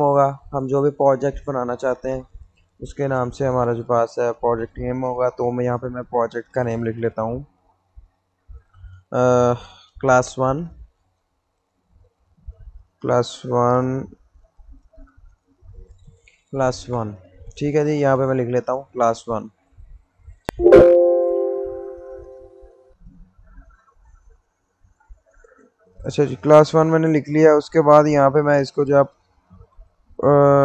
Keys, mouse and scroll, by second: 8.5 shift+Num_Lock, 9.8-11.3 typing, 13.1 s, 15.0-17.2 typing, 20.1 click, 22.5 click, 26.5 click.